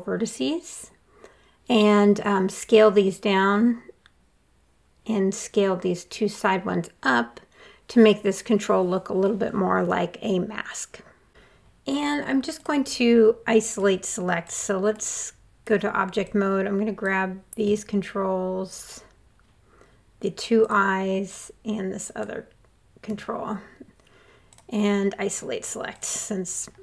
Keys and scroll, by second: 1.4 r.